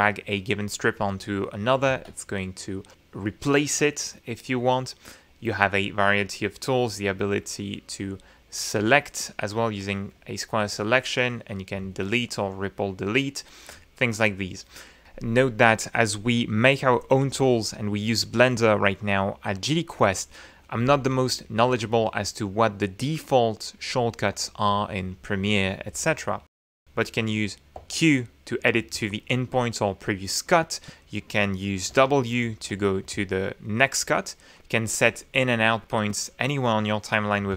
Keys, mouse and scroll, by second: 0.5-1.9 drag, 3.0 ctrl+z, 9.4 click, 10.2 click, 12.4 Delete, 13.4 ctrl+z, 27.9 q, 29.1 ctrl+z, 30.7-31.1 scroll up 4, 30.7 click, 32.0 w, 33.2 ctrl+z, 34.7 click, 35.0-35.8 scroll up 4, 35.3 click, 35.8 click.